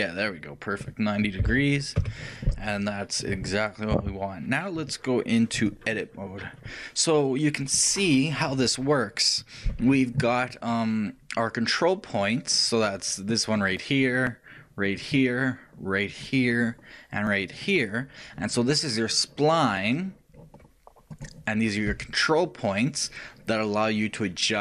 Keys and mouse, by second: 5.1-6.9 drag.